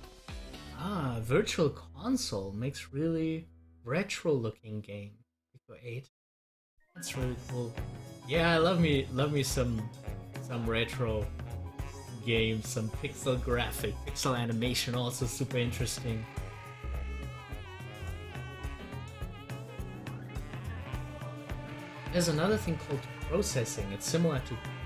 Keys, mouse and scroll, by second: 19.9 click.